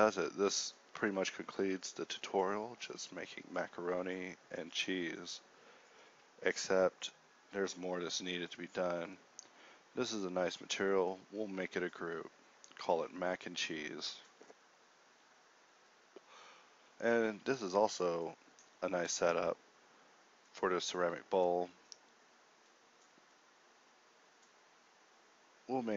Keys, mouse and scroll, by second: 7.3 g, 9.1 a, 9.5 a, 9.5 b, 10.4 ctrl+g, 11.0 Tab, 13.3 BackSpace, 15.4 g, 15.9 g, 17.3-22.1 typing.